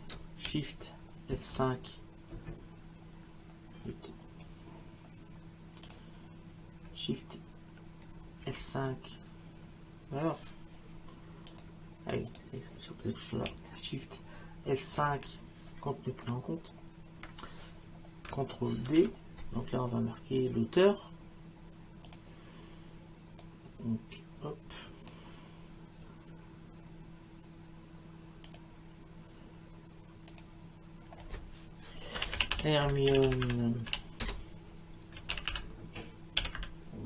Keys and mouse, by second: 1.6 shift+F5, 5.9 click, 8.4 shift+F5, 11.5 click, 15.0 shift+F5, 16.3 click, 18.9 ctrl+d, 22.1 click, 23.4 click, 28.5 click, 30.3 click, 32.0-37.0 typing.